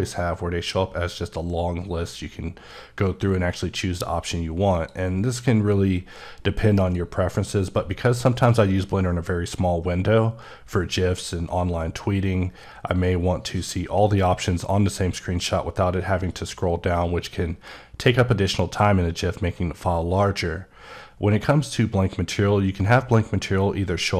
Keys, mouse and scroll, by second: 6.7 click.